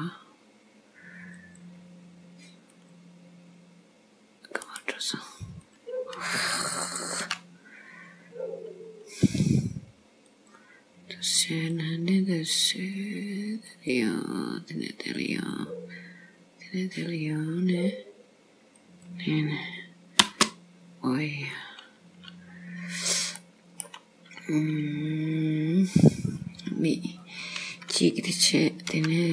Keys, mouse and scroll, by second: 4.9 right click, 5.7 click, 7.3 k, 21.6 click, 22.7-23.4 scroll up 1, 23.4 middle click, 24.8 scroll down 2, 26.1 click, 27.3 click, 29.0 k.